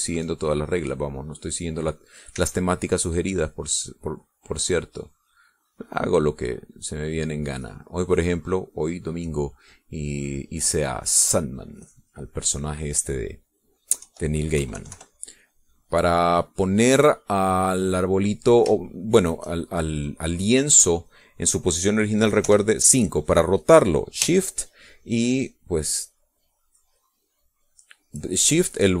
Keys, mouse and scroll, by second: 0.7 e, 1.2-2.6 drag, 3.4 e, 3.8-5.0 drag, 6.0 click, 7.2-8.3 drag, 8.6-9.8 drag, 9.9 middle click, 10.6 middle click, 11.2-12.6 drag, 12.8 click, 13.6 click, 15.0 KP_5, 15.6 KP_Subtract, 16.4 click, 18.2 click, 19.8 shift+click, 22.2 click, 23.5 KP_5, 24.1 click, 26.6-29.0 shift+drag.